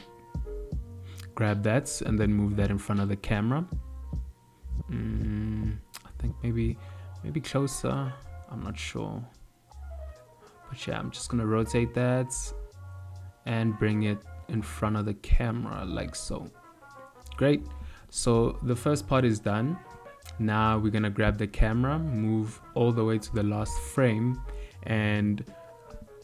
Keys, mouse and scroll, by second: 0.2 shift+middle click, 1.2 g, 9.3 r, 12.2 g, 19.8 click, 23.2 click, 23.3 click.